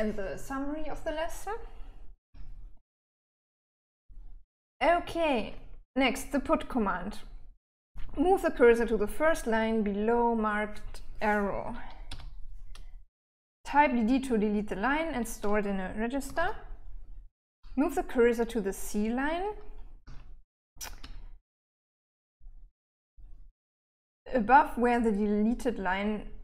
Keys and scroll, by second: 1.7-4.4 typing, 11.5 k, 15.6 d, 15.8 d, 19.4 k, 20.0 j, 20.4 j.